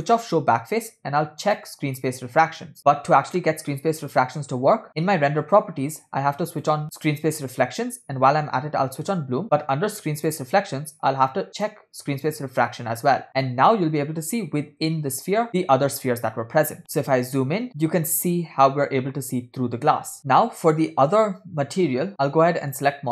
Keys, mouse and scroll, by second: 0.3 click, 1.8 click, 4.9 click, 7.0 drag, 10.2 click, 11.8 click, 16.8 click, 16.8 n, 17.6 scroll up 4, 20.1 scroll down 1, 21.1 click, 22.4 scroll up 3, 22.7 click.